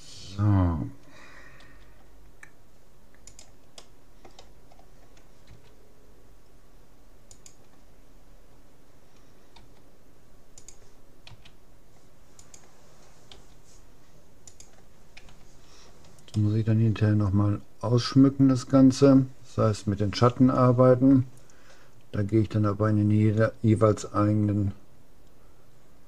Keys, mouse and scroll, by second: 1.6 g, 1.8 middle click, 3.8-5.6 middle drag, 5.6 r, 9.6 g, 11.4 s, 13.4 g, 15.4 a, 16.0-18.2 middle drag.